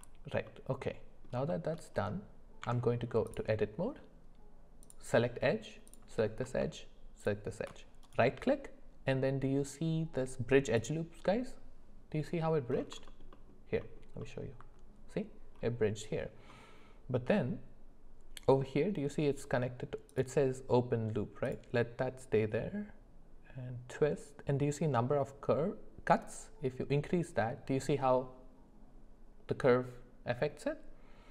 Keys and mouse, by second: 0.5 middle click, 1.5 shift+middle click, 2.6 Tab, 8.0-10.9 right drag, 13.8 alt+middle click, 20.2 click, 26.3-31.3 drag.